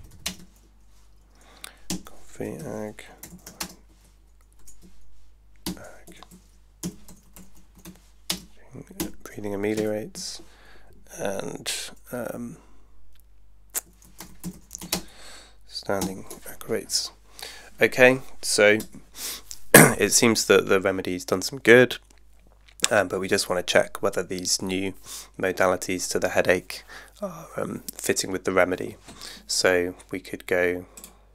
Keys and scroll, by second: 0.0-0.3 typing, 1.9-4.6 typing, 2.3 Tab, 5.7-9.0 typing, 6.1 Tab, 9.7 Tab, 13.8-16.0 typing, 18.9 Tab.